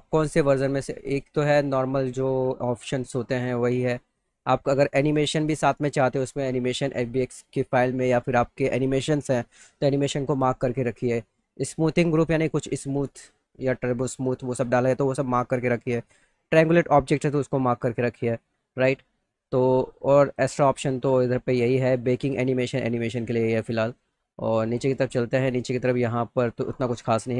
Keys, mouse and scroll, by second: 3.5 click, 5.0 click, 5.6 click, 20.2 click, 20.5 click, 21.0 click, 21.7 click, 23.1 click, 24.0 right click.